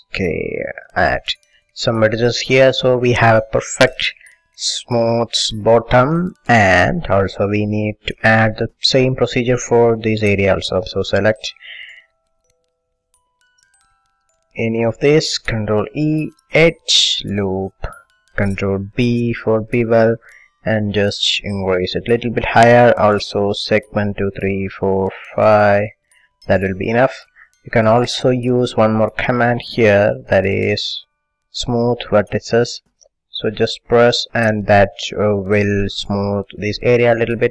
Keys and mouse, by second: 1.0-2.9 drag, 2.9-6.1 middle drag, 6.8 a, 8.6 middle click, 10.3 middle click, 11.0 a, 11.6 a, 14.5-17.5 drag, 15.9 ctrl+e, 17.9 middle click, 19.0 ctrl+b, 22.2-32.6 drag, 33.5-35.1 drag, 37.3-37.5 middle drag.